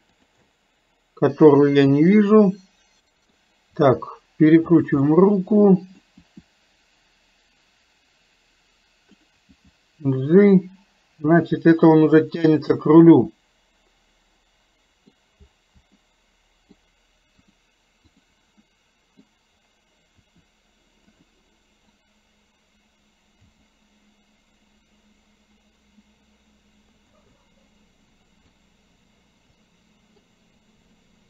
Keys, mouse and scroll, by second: 0.5-3.4 middle drag, 5.0-6.2 middle drag, 13.1-15.1 middle drag, 15.1 scroll down 1, 16.1 middle click, 17.5 click, 18.2 click, 18.7 middle click, 22.0 click, 27.4-28.7 middle drag, 29.6 middle click.